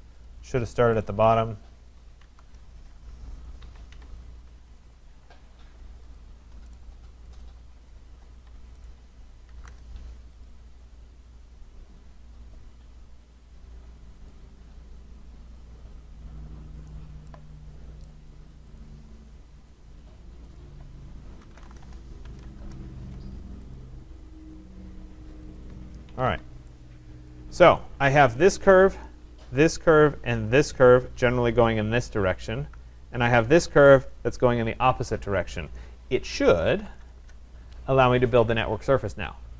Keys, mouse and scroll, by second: 0.3 click, 1.0 right click, 2.2 v, 2.4 Return, 3.6 Escape, 3.9 Escape, 4.9 click, 6.2 shift+click, 6.8 right click, 7.4 click, 8.4 Escape, 8.9 right click, 9.5 typing, 9.7 Return, 10.4 click, 13.9 v, 14.3 click, 15.2 scroll, 16.9-17.3 scroll, 17.5 middle click, 18.1 right click, 18.8 click, 19.8 click, 20.5 click, 21.2-23.6 typing, 23.8 click, 25.6 click, 26.1 Escape, 26.3 Escape, 26.8-27.6 typing, 27.3 right click, 28.2 click, 29.7 shift+click, 30.8 click, 33.5 click, 36.3-37.2 typing.